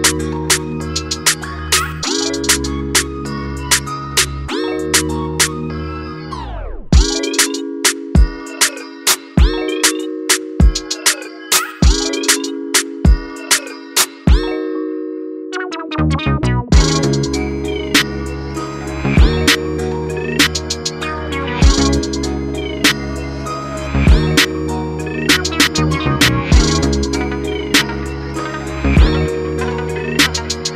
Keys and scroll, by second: 11.1 ], 11.2 ], 14.5 ctrl+-, 15.5 ctrl+=, 16.2 ctrl+-, 27.9-29.7 typing.